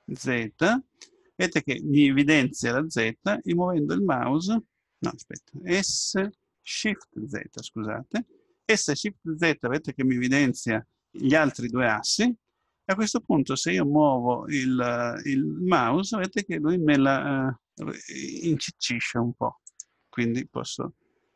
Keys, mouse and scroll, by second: 6.4 s, 20.5-21.3 middle drag.